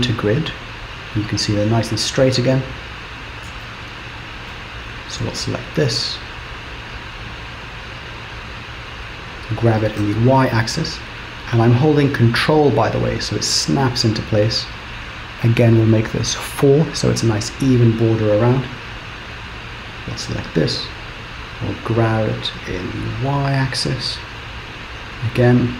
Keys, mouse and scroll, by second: 1.3 click, 1.9-2.4 scroll up 1, 2.4-3.2 Return, 3.7 shift+middle click, 5.0 click, 9.7 g, 19.0 click, 22.0 g.